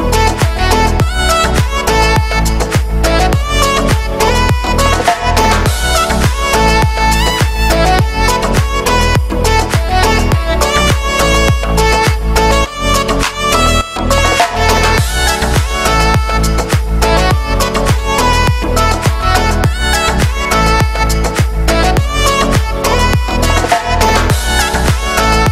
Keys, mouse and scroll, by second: 22.6 ctrl+space, 23.0 shift+middle click, 23.4 scroll up 1, 23.5 shift+middle click, 23.8 right click, 25.3 right click, 25.4 right click.